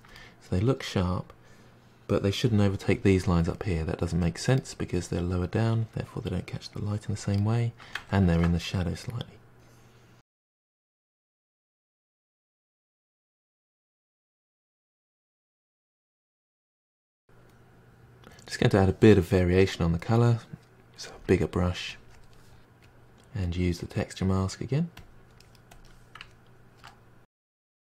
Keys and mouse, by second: 1.5-3.3 drag, 3.3-5.5 shift+middle drag, 5.5-7.5 drag, 7.5-8.3 middle drag, 8.3 ctrl+z, 9.7-10.5 drag, 10.5 middle click, 10.9-11.3 drag, 11.3-11.9 middle drag, 11.9-12.5 drag, 12.5 middle click, 12.8-13.5 drag, 13.5-15.0 ctrl+middle drag, 17.7 click, 18.6 f, 19.2 middle drag, 19.5 drag, 20.1 click, 20.3 drag, 20.8-21.2 drag, 21.2-22.1 ctrl+middle drag, 22.1-23.3 drag, 23.3 middle click, 23.5-24.0 drag, 24.0-24.7 middle drag, 24.7 f, 24.9-25.9 drag, 26.8-27.1 drag, 27.1-27.8 middle drag.